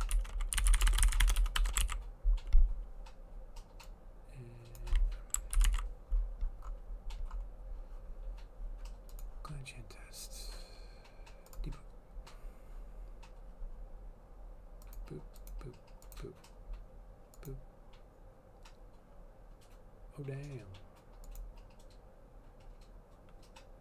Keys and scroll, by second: 0.0-2.2 typing, 5.7 ctrl+/, 5.8 ctrl+s.